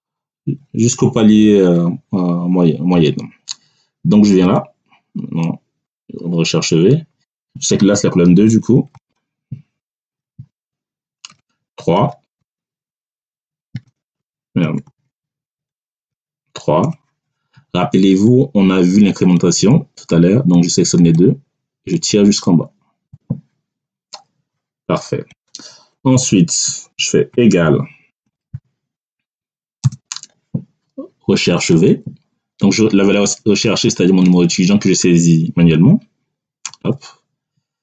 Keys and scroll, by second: 8.8 2, 9.7 BackSpace, 10.4 2, 11.2 Return, 11.9 3, 12.8 BackSpace, 13.6 3, 14.5 BackSpace, 15.8 3, 16.7 Return, 27.2-29.7 typing, 36.5 ..